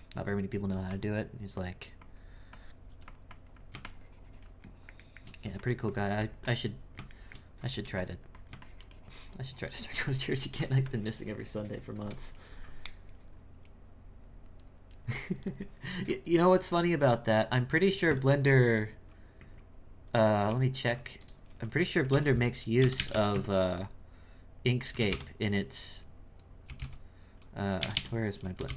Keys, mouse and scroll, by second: 1.5-2.9 drag, 3.3-4.7 drag, 4.7-5.9 shift+middle drag, 5.9-7.1 drag, 7.1 shift+middle click, 8.0-13.9 drag.